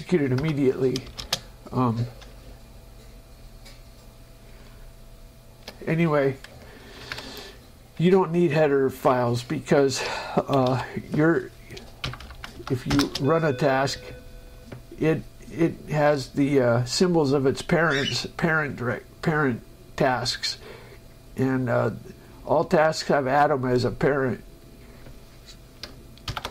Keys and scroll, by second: 0.7 Return, 1.3 space, 7.3 ctrl+Up, 10.2 Escape, 12.3 Up, 12.8 Right, 13.2 Return, 14.1 space.